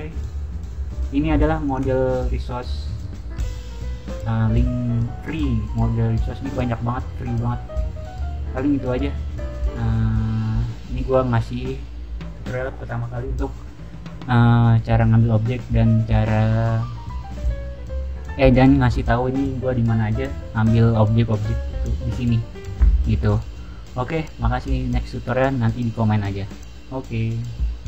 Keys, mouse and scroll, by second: 1.5 click, 4.4-4.8 scroll down 1, 6.9-10.7 scroll down 5, 10.7-11.2 scroll up 1, 11.2-12.1 scroll down 1, 12.1-12.8 scroll down 1, 12.8-16.2 scroll down 1, 16.2-26.9 scroll down 1.